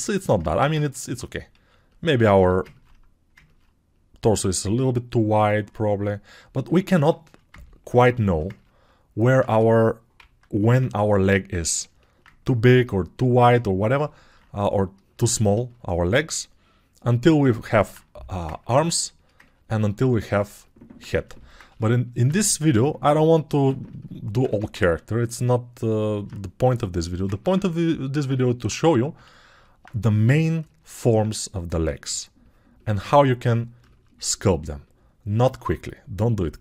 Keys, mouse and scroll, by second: 0.6 ctrl+space, 1.6 alt+q, 2.4 g, 11.3 ctrl+[, 13.3 alt+q, 33.0 shift+2.